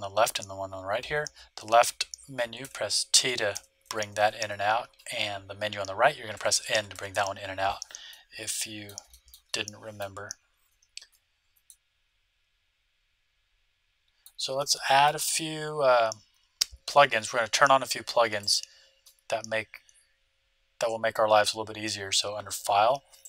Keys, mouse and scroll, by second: 2.6-4.3 typing, 6.3-7.1 typing, 8.0-11.4 middle drag, 11.6-13.4 middle drag, 14.5-16.4 middle drag, 18.4-20.1 drag, 20.2 click.